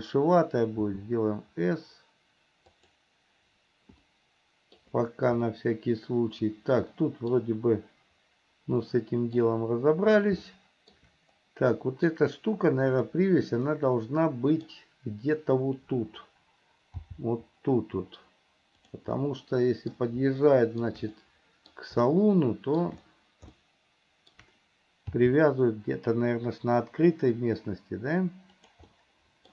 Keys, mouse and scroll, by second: 1.0 s, 4.3 shift+middle click, 5.6-7.5 middle drag, 9.1 middle click, 10.6 shift+middle click, 11.9 middle click, 13.1 click, 13.8-14.8 middle drag, 17.1 g, 19.3 middle click, 20.6 shift+middle click, 21.3 middle click, 22.3 shift+middle click, 23.7 shift+middle click, 25.4 g, 29.1 middle click.